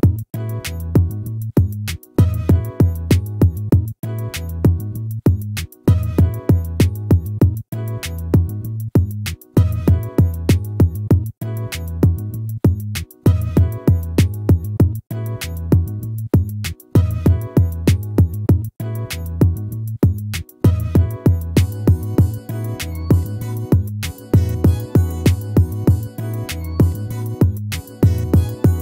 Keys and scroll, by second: 16.2 ctrl+-, 21.4 ctrl++, 23.3 ctrl++.